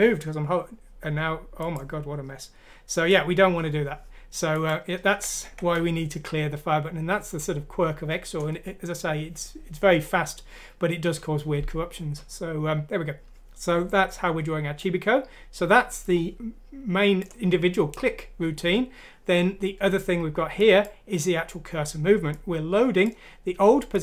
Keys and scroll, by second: 5.1 ctrl+z.